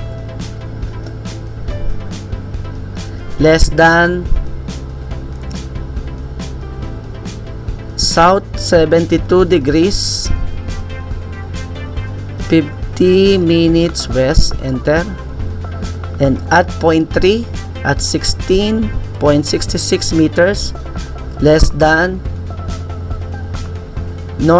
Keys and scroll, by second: 0.0-1.0 typing, 9.3-14.5 typing, 18.0-21.9 typing.